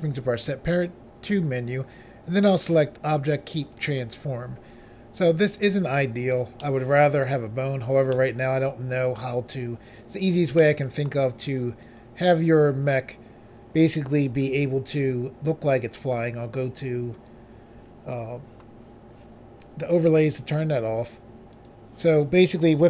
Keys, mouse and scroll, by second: 3.8 click, 5.8 click, 5.9 click, 6.7 middle click, 7.4 scroll down 1, 8.1 scroll up 1, 8.2 middle click, 10.7 middle click, 11.9 click, 12.1 click, 14.5 g, 15.8 right click, 17.3 click, 21.6 click.